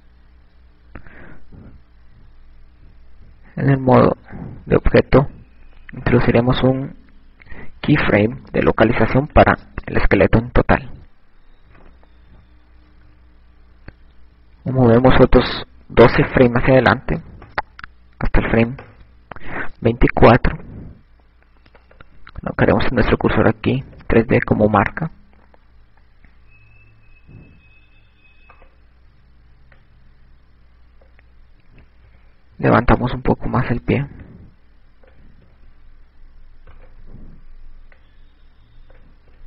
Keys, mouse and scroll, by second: 2.7 Tab, 4.4 Tab, 6.9 i, 11.2 ctrl+Tab, 16.5 click, 28.6 right click, 31.3 click, 33.5 i, 34.6 right click, 35.9 click, 36.9 i, 38.2 click.